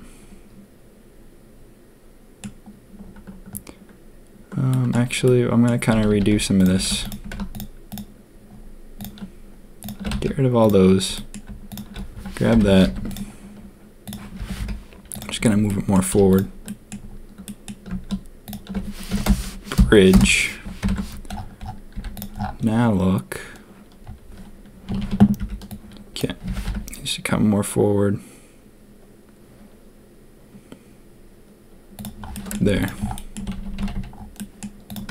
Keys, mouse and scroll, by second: 4.7 click, 5.2 click, 5.9 a, 6.0 a, 6.5 alt+click, 6.8 z, 7.5 alt+shift+click, 7.9 alt+shift+click, 8.9 alt+shift+click, 10.1 x, 11.1 click, 12.5 ctrl+KP_3, 12.8 z, 14.3 g, 15.6 click, 16.1 z, 16.6 middle click, 17.4 middle click, 19.1 F3, 20.7 ctrl+KP_3, 21.9 z, 24.8 a, 24.9 a, 25.3 b, 26.4 g, 32.3 middle click, 32.6-33.9 typing, 33.1 middle click, 33.6 Tab, 34.3 click, 35.0 Tab.